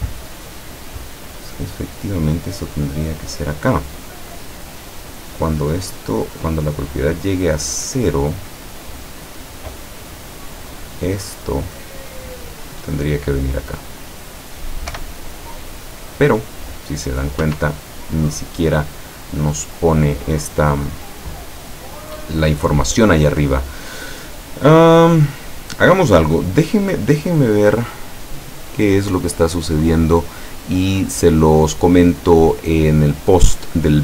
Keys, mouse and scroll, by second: 1.4-6.9 drag, 7.8-9.1 middle drag, 10.9-13.3 drag, 15.0 p, 17.6 Escape, 19.5-20.9 middle drag, 21.3-22.3 middle drag, 26.5-27.9 middle drag.